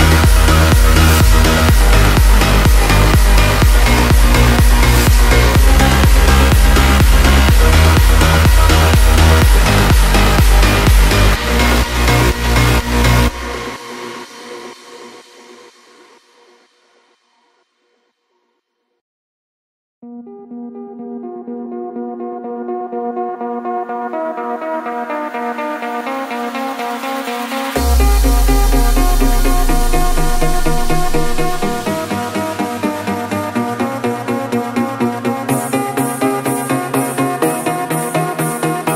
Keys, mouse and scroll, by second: 0.3-2.6 typing, 2.0-4.1 drag, 4.1 ctrl+z, 4.7 typing, 6.4 F9, 9.6 F9, 10.6 ctrl+j, 15.2 click, 17.4 click, 19.7 click, 24.2 v, 26.5 v, 27.2-38.6 shift+drag.